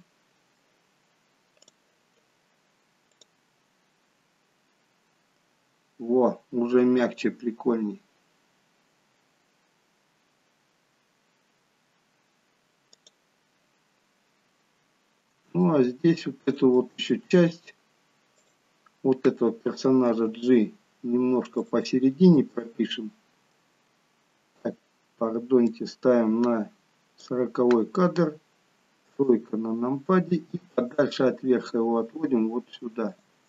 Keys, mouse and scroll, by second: 0.0 middle click, 0.0-0.5 scroll down 3, 1.7 click, 13.1 click, 13.9-15.7 scroll up 1, 15.7 shift+middle click, 15.7 scroll up 2, 16.8 middle click, 18.4 click, 20.2 g, 22.4 middle click, 25.8 click, 29.1 KP_3, 30.3 g.